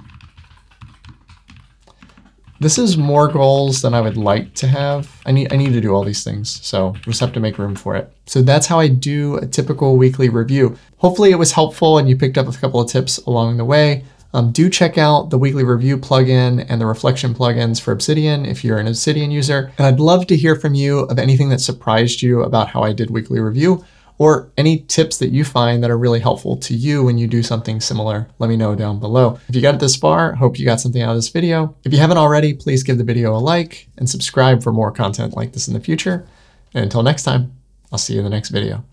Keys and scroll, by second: 2.0 Escape, 5.2 Escape, 7.5 Escape.